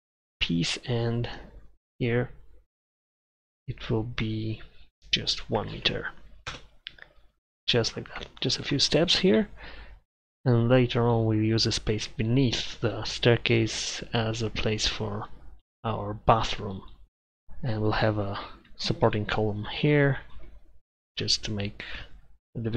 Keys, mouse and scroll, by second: 6.5 Return, 10.2-10.7 middle drag.